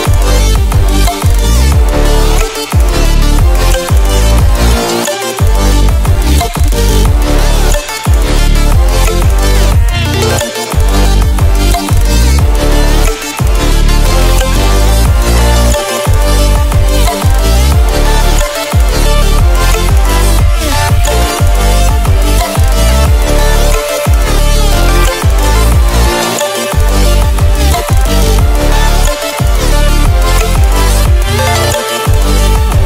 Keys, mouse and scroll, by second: 1.2-2.3 ctrl+alt+scroll up 2, 2.6-3.0 alt+shift+click, 3.9-4.8 click, 5.6 ctrl+alt+scroll down 1, 6.5-7.5 ctrl+alt+scroll down 2, 7.5 ctrl+alt+scroll, 7.7 ctrl+alt+scroll up 1, 8.2 ctrl+alt+scroll up 1, 8.9 click, 9.9-11.5 drag, 12.1-13.8 ctrl+alt+scroll down 3, 14.3 click, 14.7 scroll down 1, 15.1 ctrl+alt+scroll up 1, 17.1-19.3 ctrl+drag, 21.7-22.8 alt+shift+drag, 23.8-24.8 click, 26.5 ctrl+alt+scroll up 1, 28.2 click, 29.0 right click, 30.2 click.